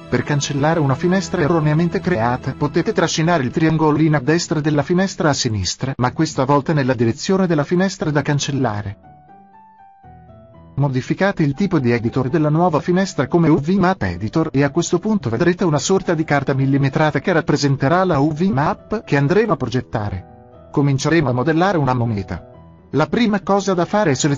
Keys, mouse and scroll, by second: 3.5-5.5 drag, 6.0-8.0 drag, 15.1 click, 18.2-23.7 middle drag.